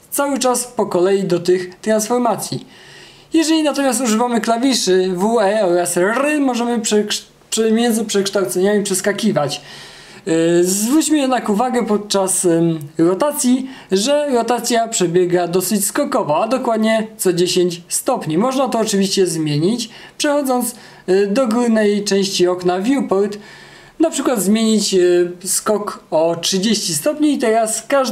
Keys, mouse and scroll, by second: 2.3 space, 3.5 e, 4.6 r, 7.6 w, 9.5 r, 10.9 e, 12.4 w, 13.9 space.